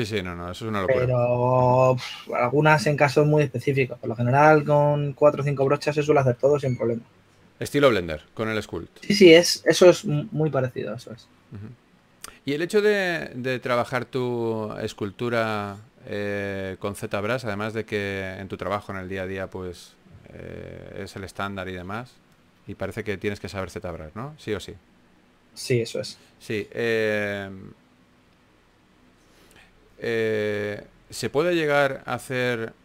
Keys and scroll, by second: 6.3 typing, 8.4 typing, 14.6 2, 18.1 2, 20.5 typing, 24.7 2, 30.9-31.8 typing.